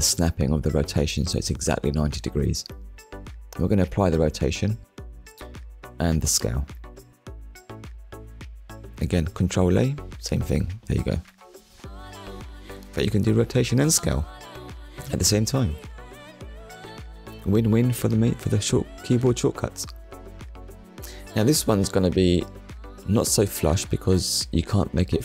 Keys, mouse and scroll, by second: 2.1 click, 2.9 click, 4.0 click, 7.1 click, 8.0 click, 8.9 click, 10.5 ctrl+a, 13.2 click, 14.4 click, 14.7 middle click, 17.1 click, 17.9 KP_1, 19.5 click, 21.2 shift+middle click, 22.0-22.4 scroll up 1, 22.9-23.3 scroll up 1, 23.4 shift+middle click, 24.9 click.